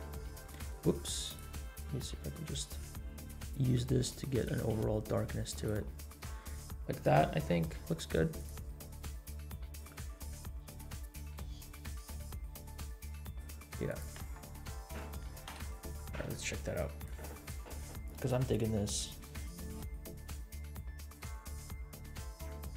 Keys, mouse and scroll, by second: 0.0 g, 1.2 click, 2.0 g, 4.6 g, 8.4 click, 13.8-14.2 drag, 17.8 F12, 17.8 click.